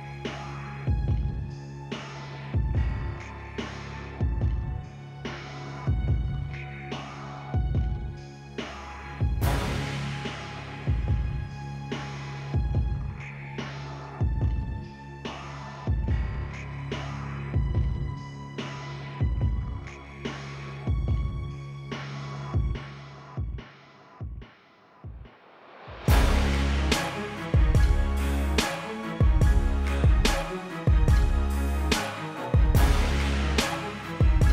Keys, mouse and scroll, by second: 1.2 click, 2.2 t, 2.4 click, 3.0 Return, 3.3 click, 4.1 t, 4.3 click, 4.6 Return, 4.8 click, 6.5 ctrl+c, 7.4 v, 7.7 Return, 8.5 click, 9.4 click, 10.4 Return, 10.9 click, 12.2 click, 16.2 Tab, 16.3 click, 17.2 ctrl+c, 18.0 click, 19.8 click, 20.3 Return, 20.7 click, 33.3 click, 33.9 click.